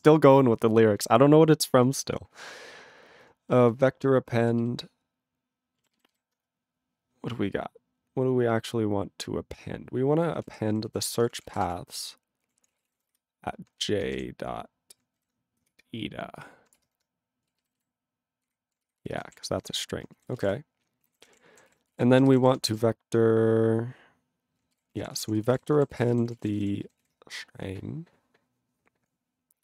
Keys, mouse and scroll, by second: 3.7 ctrl+alt+b, 3.8 ctrl+alt+b, 6.7 ctrl+b, 10.2-14.4 typing, 13.9 ctrl+f, 15.2 ctrl+n, 15.7 Return, 16.9 ctrl+BackSpace, 17.7 alt+b, 17.7 alt+b, 19.0 ctrl+f, 19.3 ctrl+f, 19.5 ., 19.6 BackSpace, 20.3 ctrl+a, 20.3 ctrl+space, 20.4 ctrl+g, 21.1 ctrl+n, 21.2 ctrl+o, 21.7-23.7 typing, 24.8 ctrl+g, 24.9 ctrl+a, 25.0 ctrl+k, 25.1 ctrl+k, 25.2 ctrl+p, 25.4 ctrl+space, 25.4 ctrl+e, 25.5 ctrl+g, 26.0 ctrl+s, 26.0 ctrl+space, 26.1 ctrl+a, 26.2 ctrl+p, 26.2 ctrl+p, 26.3 ctrl+g, 26.4 ctrl+e, 26.4 ctrl+n, 26.5 ctrl+n, 26.6 ctrl+e, 27.0 ctrl+s.